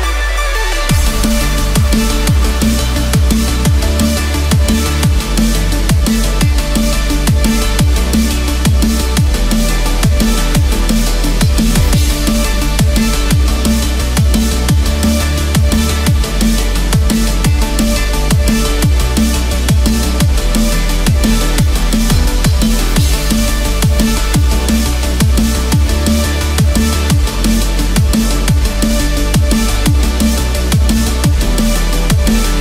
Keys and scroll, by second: 1.0 ctrl+=, 1.6 ctrl+space, 2.0 ctrl+=, 10.3 ctrl+z, 23.4 ctrl+-, 26.8 ctrl+0, 32.5 ctrl+=.